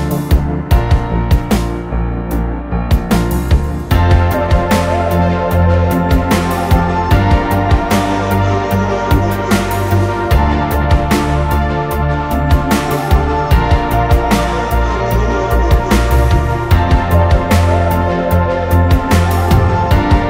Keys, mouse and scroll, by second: 0.0-0.7 typing, 2.7 ctrl+z, 5.1 scroll down 1, 9.0 space, 10.7 scroll up 1, 17.9 e.